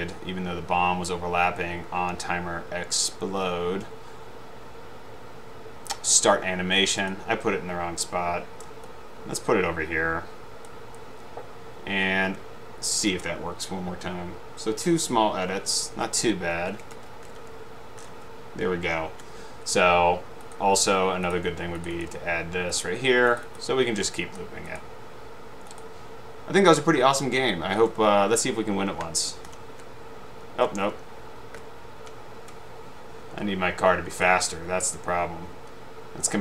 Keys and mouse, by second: 9.2-11.3 drag, 16.6 Up, 17.2 Down, 17.4 Left, 21.4-21.9 drag, 22.0 right click, 22.9 click, 23.5 right click, 24.4 click, 28.6 Up, 28.6 Right, 29.2 Left, 29.7 Right, 31.2 Right, 31.7 Left.